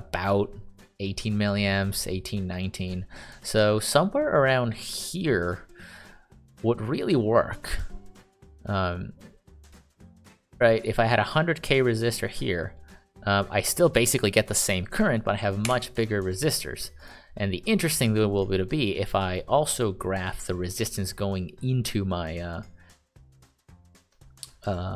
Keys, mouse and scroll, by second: 16.1 Escape, 20.1 click.